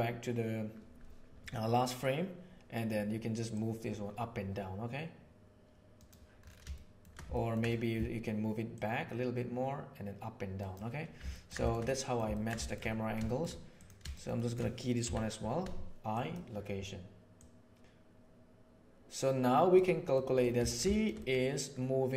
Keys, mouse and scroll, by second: 3.5 click, 4.5-6.0 middle drag, 6.8 shift+middle click, 7.4 ctrl+click, 8.8-10.8 drag, 11.3 ctrl+middle click, 11.8-12.2 middle drag, 12.3 ctrl+middle click, 12.5 shift+middle click, 13.2 shift+middle click, 13.8 click, 14.1 shift+click, 14.3 shift+click, 15.0 i, 17.3-19.7 drag, 20.1 middle drag, 20.5 ctrl+middle drag, 20.9 shift+middle click, 21.2 click.